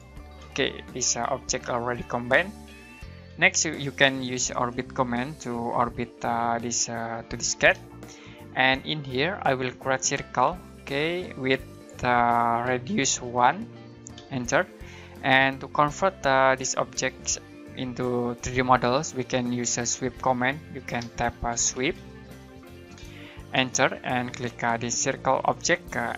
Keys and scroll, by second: 0.3 space, 10.2-11.0 typing, 13.3-14.1 typing, 21.0-22.4 typing, 23.5 space.